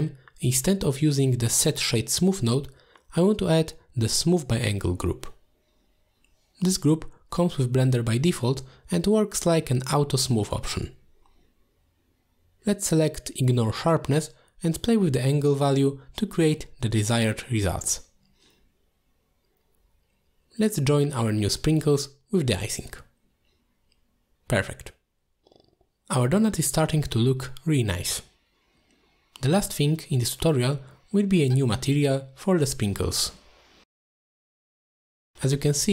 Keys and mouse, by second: 0.7 shift+click, 1.0 g, 2.0 click, 2.2 middle drag, 2.7 shift+a, 11.6 o, 15.4-16.2 drag, 16.8 alt+shift+click, 18.5 click, 20.0 middle drag, 21.0-23.0 shift+drag, 23.5-25.2 middle drag, 25.8 middle drag, 26.5 middle drag, 27.9 middle click, 30.0-30.8 drag, 31.8 alt+shift+click, 33.7 click, 34.8 click.